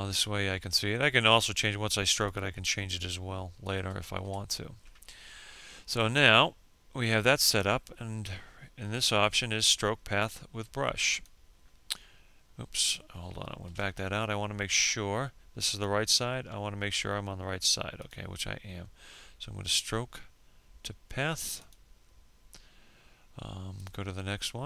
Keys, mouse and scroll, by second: 1.7 F6, 2.1 F5, 9.0 click, 11.5 ctrl+z, 13.5 click.